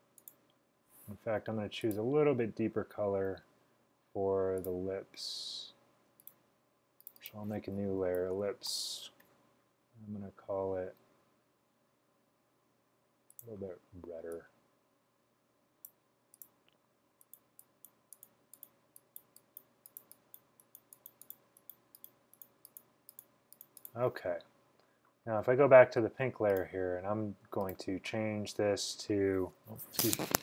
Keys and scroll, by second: 7.9-9.1 typing, 11.8 typing.